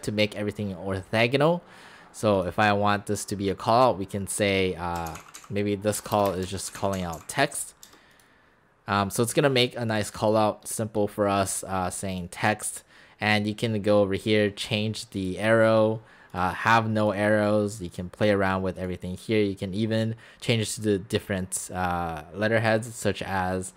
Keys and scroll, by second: 5.0 Caps_Lock, 5.1-8.1 typing, 6.5 Caps_Lock.